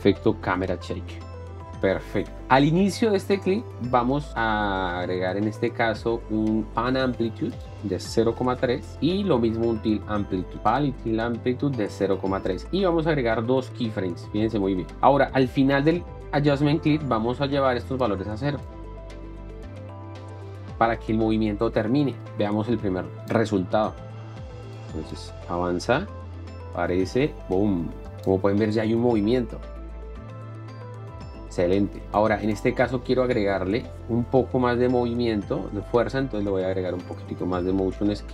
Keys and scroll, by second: 0.0-0.2 typing, 3.0 Up, 8.9 Return, 16.8 Down, 19.7 Return, 20.6 KP_0, 20.7 Return, 26.2 space, 34.0 Down, 34.4 Up.